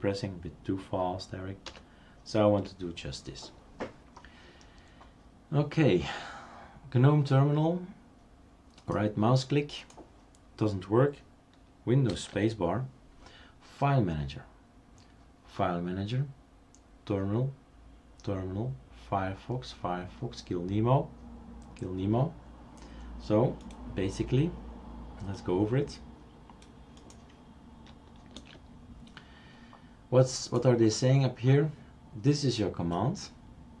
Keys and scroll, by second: 1.7 super+4, 12.1 super+space, 28.4 super+space.